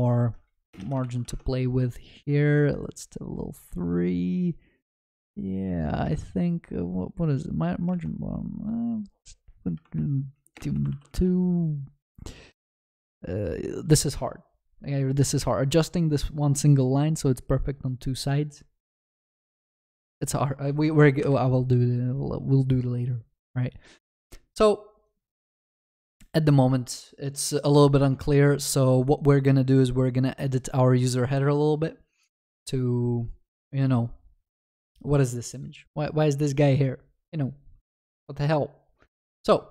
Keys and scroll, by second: 1.1 ctrl+s, 10.9 ctrl+s, 31.4 ctrl+b.